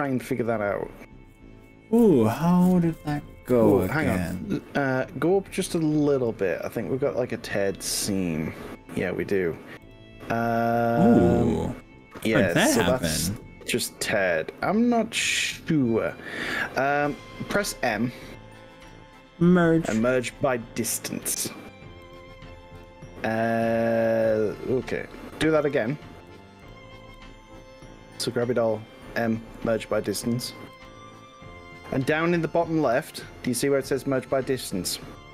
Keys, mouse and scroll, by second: 6.9-9.5 shift+middle drag, 9.9 click, 10.5 click, 11.5 scroll up 3, 11.9 scroll down 2, 12.2-13.3 shift+middle drag, 14.1 click, 18.9 m, 22.1 click, 22.9 click, 24.3 scroll up 2, 25.2 scroll down 1, 25.7 shift+middle click, 26.7 click, 27.1 click, 30.1 m.